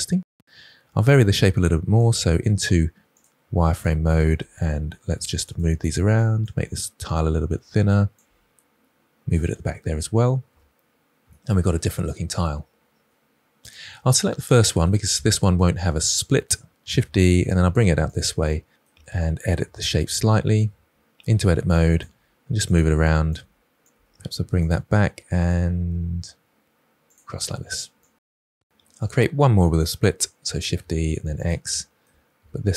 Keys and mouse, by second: 1.2 alt+z, 2.5 g, 3.0 click, 3.7 click, 4.3 g, 5.3 click, 6.4 g, 7.0 click, 8.1 g, 9.2 click, 10.4 Tab, 13.5 click, 16.7 shift+d, 16.9 x, 17.4 click, 19.1 Tab, 20.1 1, 20.6 g, 21.0 click, 21.4 g, 21.7 click, 22.5 click, 22.8 g, 23.2 click, 24.6 g, 25.4 click, 26.2 g, 26.4 click, 27.0 g, 27.4 click, 28.0 Tab, 28.9 click, 30.4 shift+d, 30.7 x, 31.3 click, 31.8 shift+middle click, 32.2 Tab.